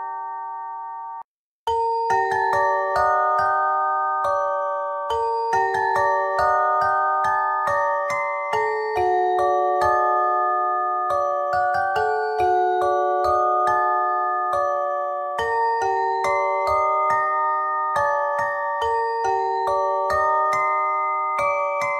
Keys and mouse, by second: 3.6 KP_1, 3.8 middle click, 6.6 click, 7.0 middle click, 9.7 middle click, 10.5 KP_1, 10.9 Tab, 12.8 z, 21.4 z.